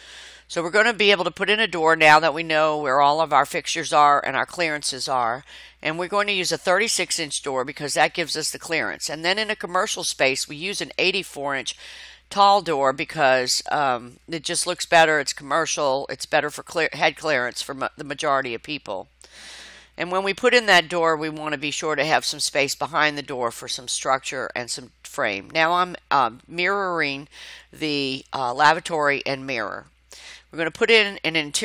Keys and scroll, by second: 16.0 Escape.